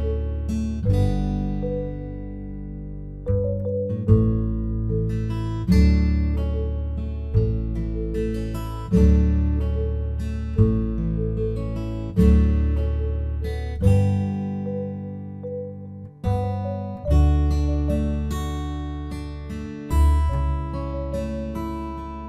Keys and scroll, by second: 10.7 ctrl+t.